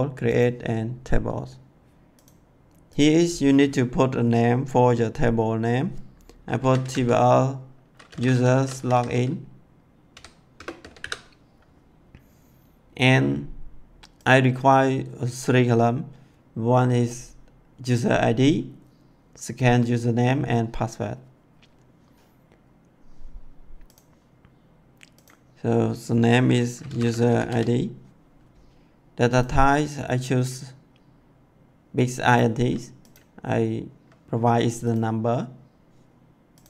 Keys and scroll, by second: 6.2-11.4 typing, 26.5-27.9 typing.